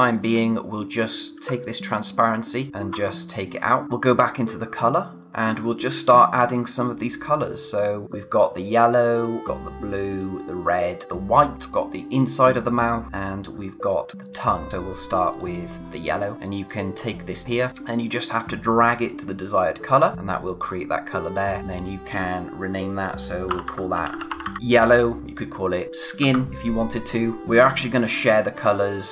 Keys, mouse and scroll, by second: 0.9 click, 1.6 alt+click, 3.2-3.8 scroll down 1, 3.8 click, 6.7-7.8 scroll down 1, 9.1 click, 12.1 click, 15.3 click, 23.4-24.9 typing, 26.2 Return, 27.4-28.4 scroll up 1.